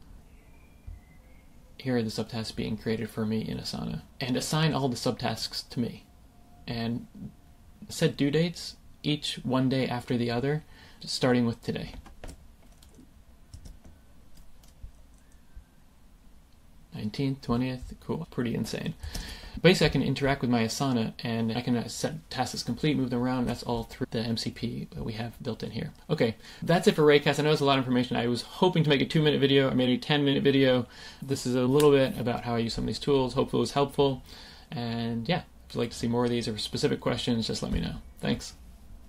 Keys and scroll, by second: 12.9 super+v, 13.5 Return, 19.1 super+Return.